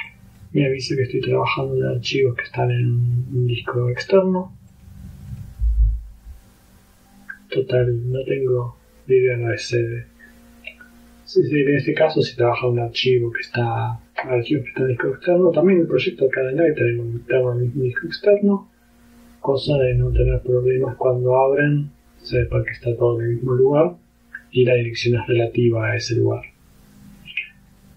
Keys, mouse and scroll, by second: 0.1 click, 1.7 click, 2.8 click, 3.5 click, 4.1 click, 4.8 click, 5.4 click, 8.3 click, 16.1-17.7 drag, 18.4 click, 27.8 click.